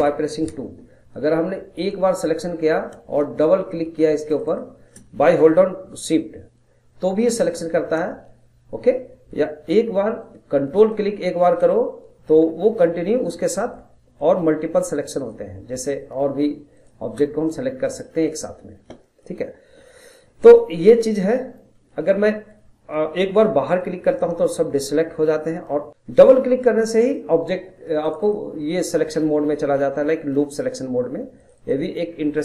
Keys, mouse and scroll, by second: 0.0 2, 1.8 click, 4.3 shift+click, 4.5 shift+click, 10.8 ctrl+click, 14.2 ctrl+click, 14.7 ctrl+click, 15.2 ctrl+click, 16.8 ctrl+click, 17.5-21.5 middle drag, 21.5 scroll up 1, 21.8-23.7 middle drag, 23.7 click, 25.9 click, 26.8 click, 27.0 click, 28.0 click, 28.2 click, 31.4 click, 31.6 click, 32.0-32.4 scroll down 1.